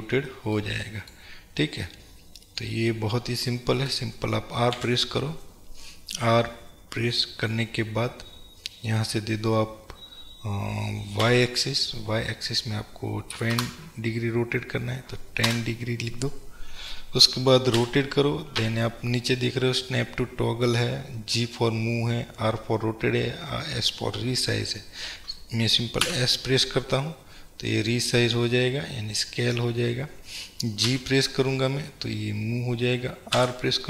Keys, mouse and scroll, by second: 2.2-2.9 scroll up 1, 2.9-3.6 scroll down 1, 4.8 r.